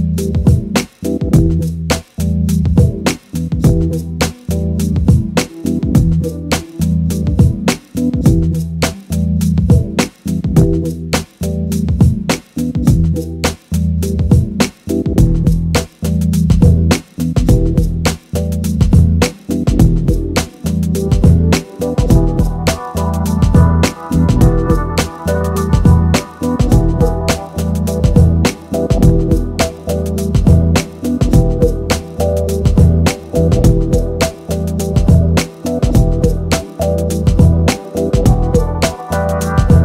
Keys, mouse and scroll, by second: 0.0-2.9 typing, 0.1 middle click, 0.2 scroll up 1, 0.2 middle click, 1.1 shift+middle click, 1.9 shift+middle click, 2.1 scroll down 1, 2.3 click, 2.3 middle click, 2.4 click, 2.5 middle click, 2.7 scroll up 1, 2.7 middle click, 2.8 middle click, 3.4 middle drag, 4.4 middle click, 4.6 middle click, 4.8 middle click, 4.9 middle click, 5.2 middle click, 5.5 middle click, 5.8 middle click, 6.0 middle click, 6.1 middle click, 6.3 middle click, 7.3 middle click, 7.5 middle click, 7.9 middle click, 8.2 middle click, 8.3 middle click, 8.6 middle click, 9.1-11.4 typing, 9.3 middle click, 9.5 ctrl+z, 9.5 middle click, 9.9 middle click, 10.2 middle click, 10.6 middle click, 10.7 scroll up 2, 11.0 middle click, 11.5 scroll down 2, 11.6 middle click, 11.8 ctrl+b, 11.9 scroll up 3, 12.2 middle click, 12.3 click, 12.6 middle click, 12.6 s, 12.7 middle click, 12.8 g, 12.8 middle click, 13.0 scroll up 3, 13.1 middle click, 13.1 g, 13.4 middle click, 13.5 g, 13.6 middle click, 13.8 scroll down 4, 13.9 Tab, 14.0 click, 14.3 scroll up 1, 14.3 shift+middle click, 14.5 scroll down 1, 15.2 scroll down 1, 15.2 middle click, 15.3-17.3 typing, 15.9 middle click, 15.9 scroll up 4, 16.2 shift+middle click, 16.7 scroll up 1, 16.8 middle click, 16.8 scroll down 3, 16.9 middle click, 17.2 middle click, 18.1-18.5 scroll down 5, 18.2 click, 18.6 middle click, 18.6-21.1 typing, 18.7 middle click, 19.0 scroll up 2, 19.3 scroll down 1, 19.8 scroll down 3, 19.8 middle click, 20.1 shift+middle click, 20.3 scroll up 4, 20.3 alt+click, 21.8 Tab, 21.9 middle click, 21.9 scroll down 3, 22.0 Tab, 22.1 shift+middle click, 22.1-23.4 typing, 22.2 middle click, 22.4 middle click, 22.7 middle click, 22.9 middle click, 23.1 middle click, 23.2 scroll up 2, 23.3 middle click, 23.5 shift+middle click, 23.9 ctrl+b, 24.1 ctrl+z, 24.3 middle click, 24.4 scroll down 5, 24.5 middle click, 24.5-39.8 typing, 24.6 middle click, 24.7 click, 25.3 middle click, 25.4 click, 25.6 middle click, 25.8 click, 26.0 middle click, 26.3 middle click, 26.6 middle click, 26.7 click, 26.9 shift+middle click, 27.3 middle click, 27.4 scroll up 3, 28.1 middle click, 28.5 Tab, 28.6 middle click, 28.7 middle click, 29.1 Tab, 29.5 scroll down 3, 29.6 click, 29.7 middle click, 30.2 middle click, 31.6 scroll down 6, 31.7 shift+middle click, 31.7-32.2 scroll up 3, 31.9 middle click, 32.2 shift+middle click, 32.5 middle click, 32.7 middle click, 32.9 scroll up 1, 32.9 alt+click, 33.2 middle click, 33.3 Tab, 33.6 alt+shift+click, 33.8 middle click, 34.4 middle click, 34.4 scroll up 3, 34.5 shift+click, 34.6 middle click, 34.7 middle click, 35.0 shift+middle click, 35.5 shift+click, 35.5 middle click, 35.7 middle click, 35.9 middle click, 36.1 middle click, 36.4 middle click, 36.6 shift+middle click, 37.4 middle click, 37.6 middle click, 37.7-38.3 scroll up 4, 37.8 middle click, 38.1 middle click, 38.3 middle click, 38.5 middle click, 38.7 middle click, 38.9 middle click, 39.2 shift+middle click, 39.6 middle click.